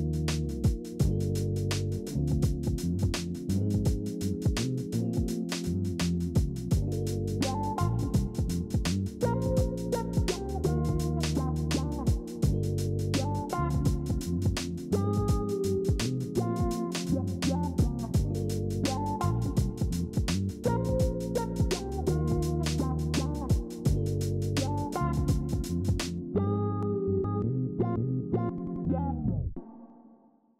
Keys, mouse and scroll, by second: 10.9 ctrl+c, 13.4 ctrl+f, 25.5 ctrl+z.